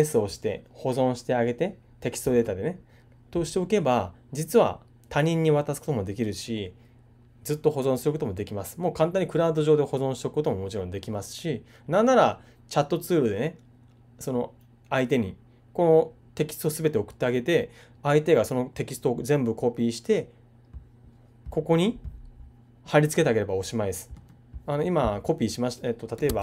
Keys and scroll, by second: 26.2 super+Tab.